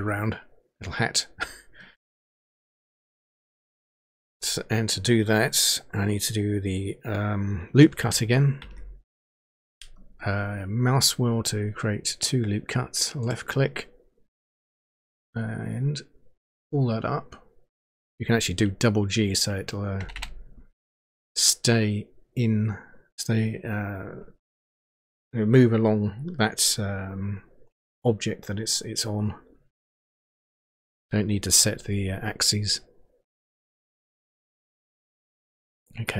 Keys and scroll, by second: 8.6 ctrl+r, 20.0 g, 20.1 g.